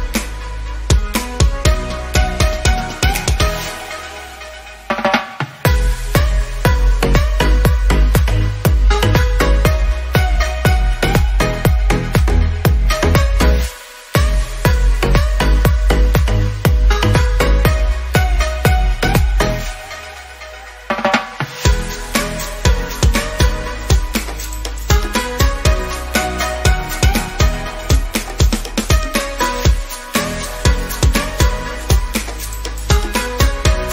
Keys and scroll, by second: 0.4 ctrl+alt+z, 6.8 ctrl+alt+z, 21.3 ctrl+d.